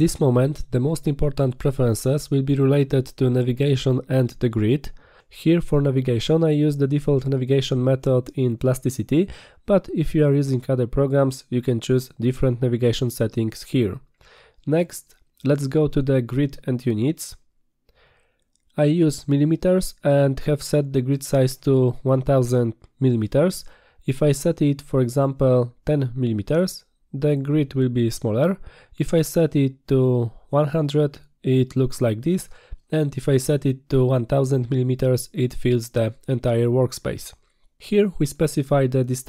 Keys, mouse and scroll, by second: 18.2 click, 23.8 click, 25.0 BackSpace, 25.4 BackSpace, 26.7 click, 28.0 click, 28.9 click, 32.7 click, 35.3 click.